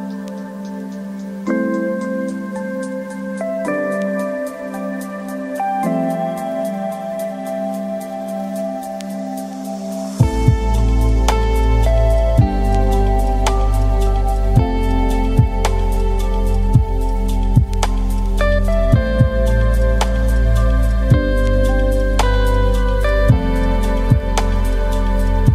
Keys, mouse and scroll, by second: 0.0 scroll down 2, 0.1 middle click, 0.3 Tab, 0.4 click, 0.5-3.5 typing, 0.8 ctrl+r, 1.1 click, 2.2 middle click, 2.3 scroll up 1, 2.3 middle click, 2.7 Tab, 2.7 Tab, 3.0 Tab, 3.1 click, 3.1 middle click, 3.3 scroll down 2, 3.8 click, 4.9 click, 5.1 KP_0, 6.1 click, 6.8 click, 7.6 click, 8.0-8.3 scroll down 7, 8.3-9.6 drag, 9.8-11.1 drag, 11.1 scroll up 2, 11.3 KP_0, 11.4 click, 11.5-12.7 right drag, 14.3 KP_0, 14.5 scroll down 3, 14.5 middle click, 14.8 click, 16.4-17.7 drag, 17.7 scroll up 2, 17.7 middle click, 18.0 KP_0, 19.3 shift+click, 19.6 r, 21.0 Tab, 21.1 Tab, 21.2 click, 21.3 g, 21.6 click, 21.6 g, 22.1 click, 22.9 Tab, 23.1 1, 23.3 click, 23.4 g, 24.2 Tab, 24.3 click, 24.4 g, 25.4 shift+click.